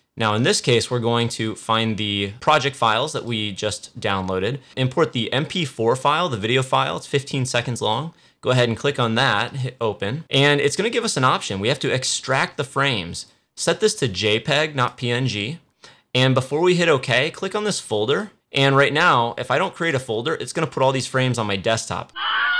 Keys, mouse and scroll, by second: 7.8 click, 10.9-17.2 drag, 18.0 click, 19.8 right click, 22.1 click.